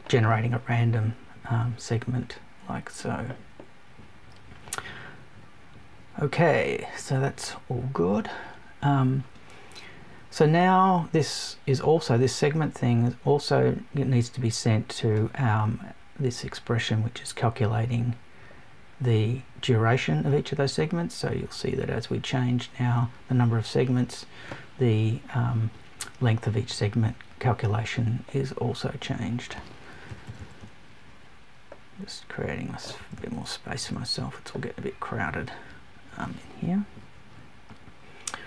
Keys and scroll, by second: 29.9 Down, 32.9 Down.